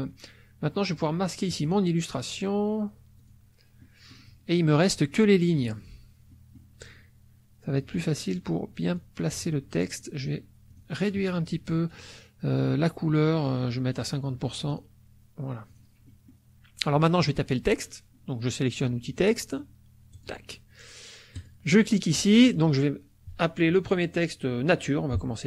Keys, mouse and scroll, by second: 1.5 click, 3.2 click, 3.8 middle click, 6.3 middle click, 8.9 click, 9.9 shift+click, 10.7 shift+click, 13.8 right click, 14.7 click, 15.7 click, 16.1 middle click, 17.0 middle click, 20.1 click, 21.3 click.